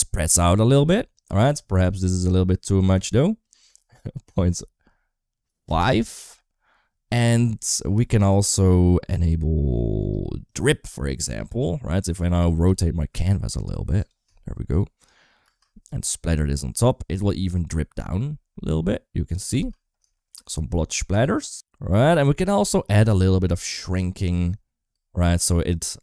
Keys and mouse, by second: 0.5 space, 3.2-5.7 drag, 10.4 click, 11.4 middle click, 12.1 r, 15.4 space, 17.1-17.7 middle drag, 19.4 space, 20.0 shift+middle click, 22.2 drag, 23.3 click, 23.7 click, 24.8 space.